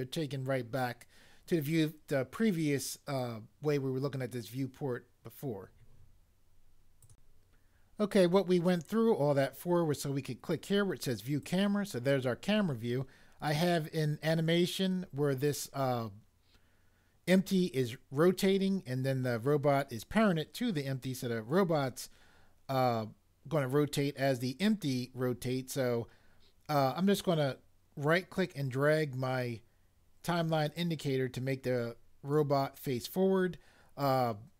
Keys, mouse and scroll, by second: 7.1 click, 7.1 click, 11.4 click, 11.5 click, 27.2 right click.